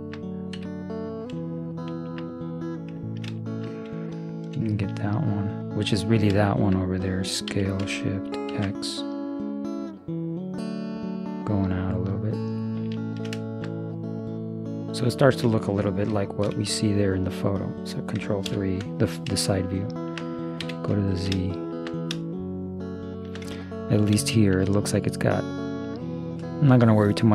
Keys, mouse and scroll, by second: 0.6 z, 2.3 middle click, 2.5-4.3 middle drag, 4.3-5.9 drag, 4.3-5.9 right drag, 5.9-8.2 middle drag, 7.5 s, 13.1 middle click, 13.5-15.1 middle drag, 16.1 Left, 16.5 KP_3, 18.5 ctrl+KP_3, 20.6 z, 25.3 middle click.